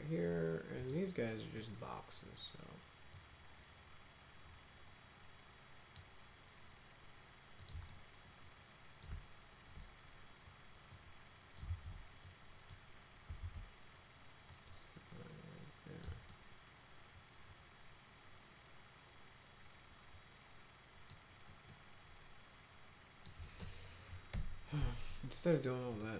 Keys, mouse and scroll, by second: 0.8 click, 1.5 click, 3.1-6.0 drag, 7.6 click, 7.9-9.0 alt+middle drag, 10.9 click, 11.7 ctrl+z, 12.3 click, 13.4 ctrl+z, 14.5-16.1 drag, 16.3-21.1 alt+middle drag, 21.7-23.3 alt+middle drag, 23.5 middle click, 24.3 Delete, 25.9 click.